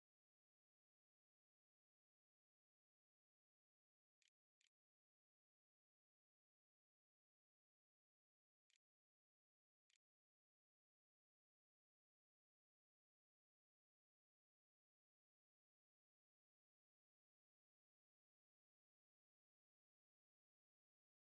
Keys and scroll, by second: 3.4-5.1 typing, 6.8-8.0 typing, 9.4 ctrl+s, 10.5 a.